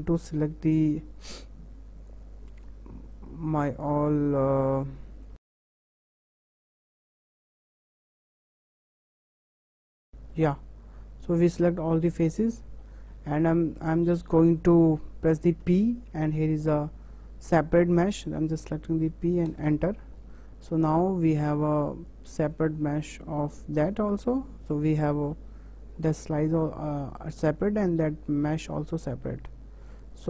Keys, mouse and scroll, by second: 1.0 3, 2.2-3.9 drag, 4.7 shift+click, 5.3 ctrl+z, 5.7 b, 6.0 b, 6.0 shift+middle click, 6.2 shift+click, 6.4 shift+click, 6.7 shift+click, 6.9 shift+click, 6.9 shift+middle click, 7.0 shift+click, 7.1 shift+middle click, 7.2 shift+click, 7.3 shift+click, 7.4 shift+middle click, 7.7 shift+click, 7.8 shift+click, 7.9 shift+click, 8.0 middle click, 8.1 shift+click, 8.2 shift+middle click, 8.3 shift+click, 8.6 ctrl+z, 8.9 shift+click, 9.5 middle click, 9.6 ctrl+shift+click, 10.0-11.6 middle drag, 11.6-12.0 scroll down 3, 12.0-13.9 middle drag, 13.9-14.3 scroll up 2, 14.3-19.6 shift+middle drag, 22.1-23.3 drag, 23.3 Tab, 23.9 click, 25.3 g, 27.8 click, 28.0 g.